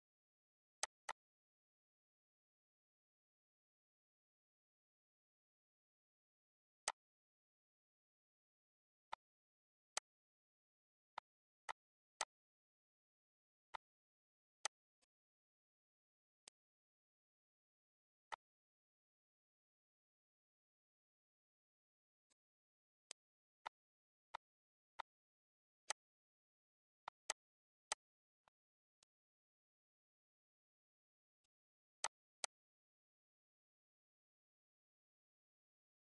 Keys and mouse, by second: 0.8 click, 1.4 ctrl+s, 4.8 click, 6.8 click, 7.4 click, 9.1 click, 9.9 click, 11.1 shift+click, 11.6 shift+click, 12.1 click, 13.3 click, 14.6 click, 15.4 click, 16.4 click, 18.3 click, 20.7 click, 22.2 click, 23.0 click, 23.6 click, 24.3 click, 24.9 click, 25.8 click, 27.0 click, 27.8 click, 28.5 click, 29.0 click, 29.5 click, 29.9 ctrl+s, 31.5 click, 32.0 click, 32.9 ctrl+s, 35.5 click.